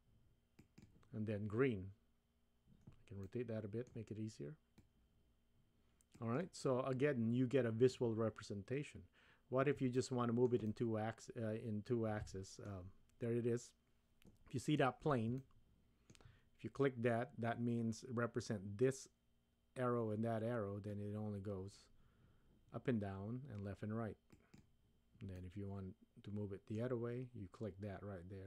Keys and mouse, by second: 3.2-3.9 middle drag, 4.9-6.4 drag, 9.9-10.5 shift+middle drag, 10.7-12.9 middle drag, 15.4-16.2 shift+middle drag, 20.9-24.6 drag, 25.4-26.9 middle drag.